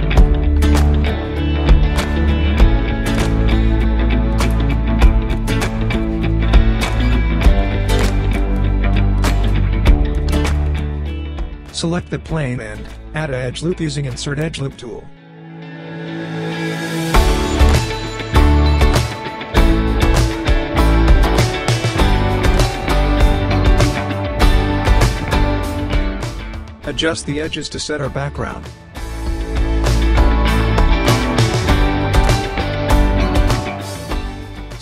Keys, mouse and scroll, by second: 0.4 scroll up 1, 0.8 scroll down 1, 1.3-1.9 alt+drag, 3.6-5.4 right drag, 5.7 scroll down 1, 7.3-8.5 shift+right drag, 10.3 click, 10.7 w, 10.8-11.5 right click, 11.1 click, 12.2-13.2 shift+right drag, 14.2-16.6 drag, 17.7 w, 18.5 click, 19.7 space, 21.2 scroll down 1, 22.2-23.1 middle click, 23.1 scroll down 1, 24.3-25.3 drag, 25.6-26.9 typing, 30.7 space, 31.9 scroll up 1, 32.3-33.2 alt+drag.